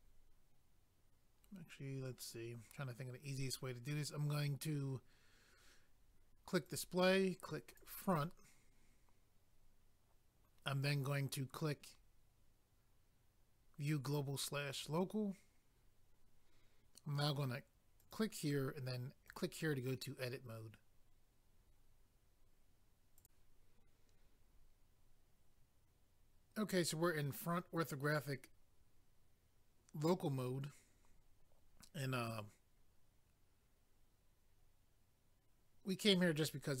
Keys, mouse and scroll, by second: 6.7 click, 6.8 click, 7.7 click, 7.8 click, 14.7 click, 14.8 click, 18.0 click, 18.1 click, 19.3 click, 19.4 click, 23.2 click, 24.1-25.7 scroll down 1, 25.7 scroll down 1.